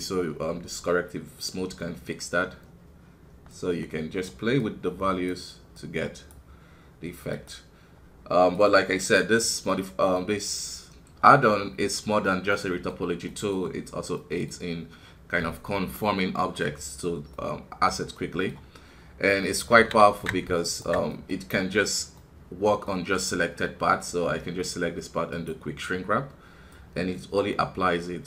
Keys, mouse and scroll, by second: 1.4 scroll down 2, 3.4 scroll down 1, 3.5-9.7 drag, 9.7-17.1 middle drag, 17.3-19.8 middle drag, 19.8 alt+a, 20.0 alt+KP_3, 20.6-22.1 alt+right drag, 22.1-25.3 middle drag, 25.3-28.2 drag.